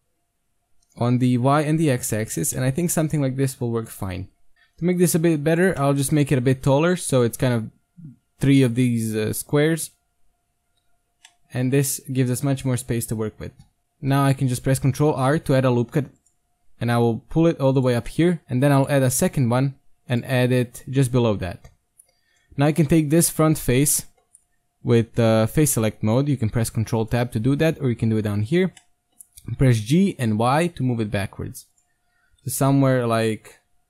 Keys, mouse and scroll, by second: 2.6-4.1 middle drag, 4.1 KP_1, 4.5 Tab, 4.5-5.5 right drag, 4.5 z, 4.6 c, 5.7-7.2 drag, 6.0 g, 9.7 z, 13.3 Tab, 13.8 Tab, 14.1 ctrl+r, 18.1 middle click, 18.5 ctrl+r, 21.5 ctrl+Tab, 22.8-23.9 right drag, 23.9 middle click, 25.0-25.8 middle drag, 25.1 ctrl+Tab, 28.8-30.9 middle drag, 29.9 g, 32.3 KP_3, 32.8 g.